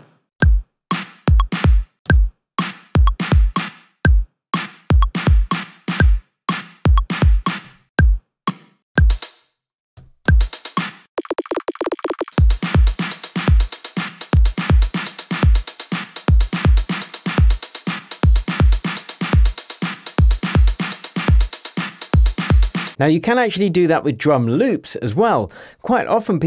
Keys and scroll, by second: 0.3 0, 0.4 space, 1.8 space, 1.9 0, 2.0 space, 5.5 0, 7.6-8.9 typing, 10.0-12.2 typing, 15.7 0, 17.4 0, 19.6 0.